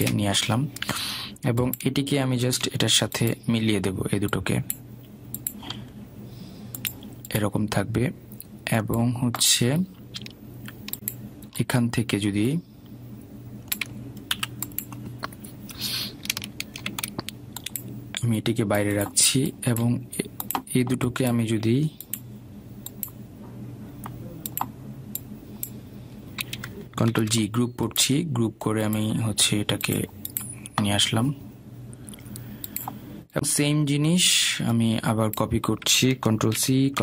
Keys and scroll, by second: 15.7 Delete, 28.5 ctrl+g.